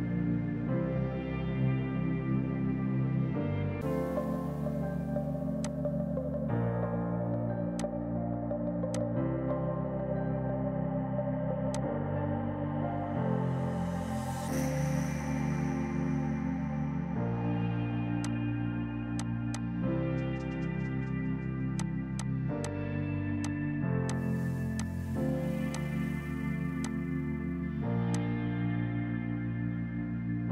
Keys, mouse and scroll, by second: 5.7 click, 11.4 Delete, 11.8 click, 18.3 click, 21.1 ctrl+u, 21.8 click, 21.8 typing.